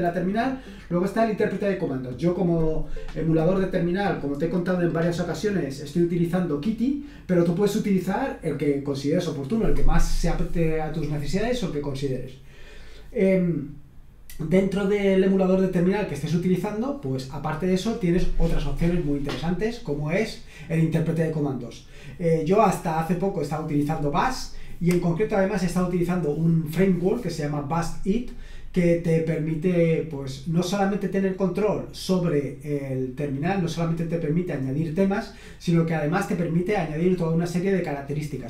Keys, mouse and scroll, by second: 3.6 click, 5.5 click.